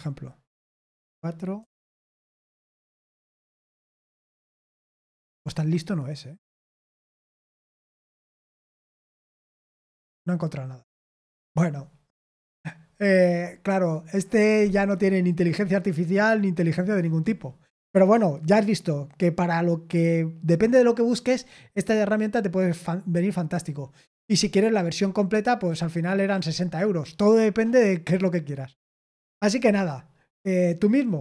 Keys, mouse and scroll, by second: 1.5-2.9 typing, 3.6 Return.